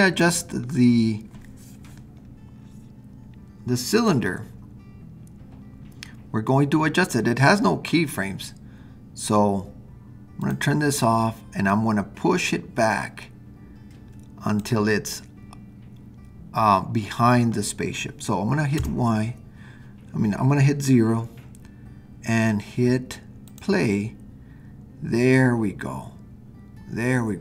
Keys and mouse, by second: 11.9-13.4 drag, 18.7 KP_0, 23.6 click.